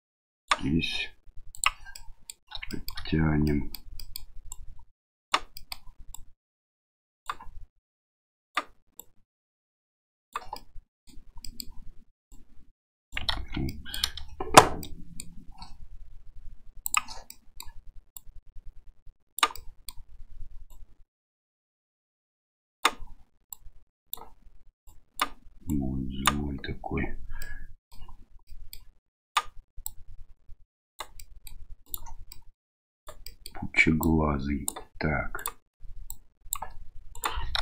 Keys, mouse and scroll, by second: 1.6 click, 2.0 middle click, 2.7 shift+middle click, 3.5 middle click, 4.0 middle click, 4.5 right click, 5.5 middle click, 6.1-7.2 right drag, 7.8 right click, 8.9-10.3 right drag, 10.6 middle click, 11.4 middle click, 12.3 right click, 13.3 ctrl+z, 13.7 middle click, 14.8 middle click, 16.8 click, 17.3 middle click, 18.1-19.4 right drag, 19.6 middle click, 20.7-22.8 right drag, 23.5 right click, 24.8 right click, 25.7 right click, 27.4 middle click, 28.5 middle click, 29.3 right click, 29.8-31.0 drag, 31.2 middle click, 31.8 right click, 32.3 middle click, 33.0 right click, 33.2 middle click, 34.0 click, 35.4 right click, 36.1 click, 37.1 right click.